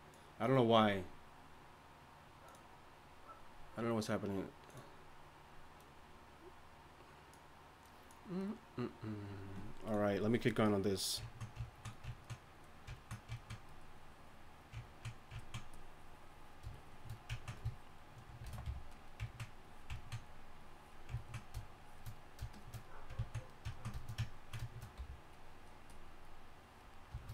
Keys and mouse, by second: 10.9-12.1 middle drag, 12.1 drag, 14.8-17.4 drag, 18.6 shift+c, 18.9 f.